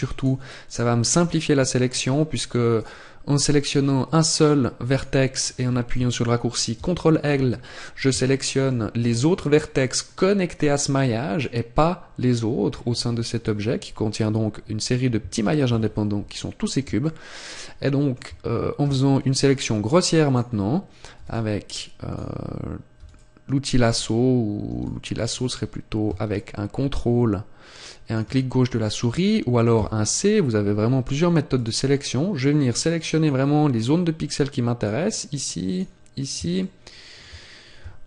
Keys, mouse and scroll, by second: 0.1 right click, 4.9 right click, 6.7 ctrl+l, 7.5-8.3 scroll up 1, 8.3 shift+middle click, 8.3-8.7 scroll up 2, 9.0 middle click, 9.9 middle click, 10.2 middle click, 12.4-12.8 scroll down 1, 14.3-15.6 scroll down 3, 15.6 KP_7, 17.0 shift+middle click, 26.3 ctrl+click.